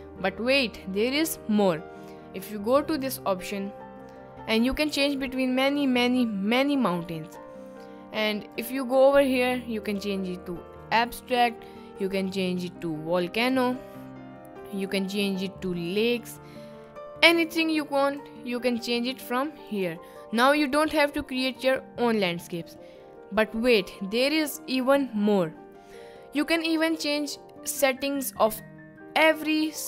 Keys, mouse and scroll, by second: 3.0 click, 5.5 middle click, 7.3 middle click, 8.6-10.3 drag, 12.1-13.8 drag, 14.7-16.2 drag, 17.0 middle click, 18.0-20.1 drag, 20.7 middle click, 21.6 middle click.